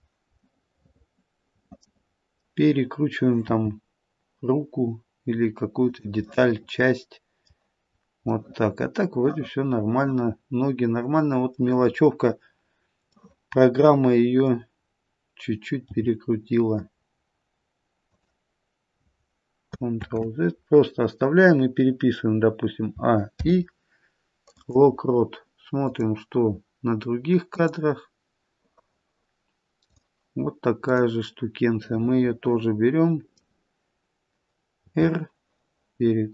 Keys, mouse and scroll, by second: 0.5 middle click, 3.4 r, 6.2 middle click, 6.2 scroll up 1, 8.4 middle click, 11.8-13.1 scroll up 1, 13.1 middle click, 13.1-13.8 scroll up 1, 15.8 g, 20.0 ctrl+z, 22.9 a, 23.2 i, 25.7 click, 27.5 click, 32.0 click, 32.0 middle click, 34.9 r.